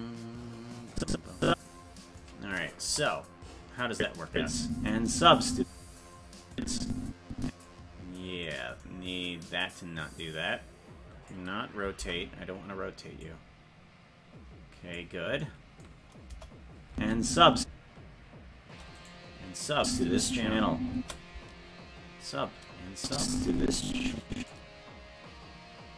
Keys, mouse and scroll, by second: 0.9 click, 2.8 KP_0, 3.9 click, 4.3 space, 5.9 space, 6.5-7.6 drag, 8.5 right click, 10.2-11.3 drag, 12.0 alt+r, 13.2-14.9 drag, 16.3 KP_0, 16.9 space, 18.3 space, 19.0 right click, 19.8 space, 23.0-24.5 drag.